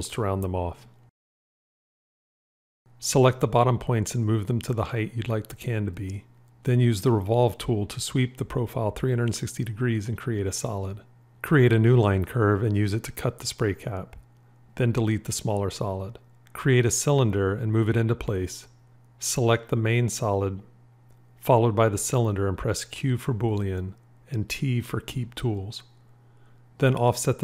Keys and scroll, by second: 4.0 g, 14.7 c, 22.5 q, 24.6 t.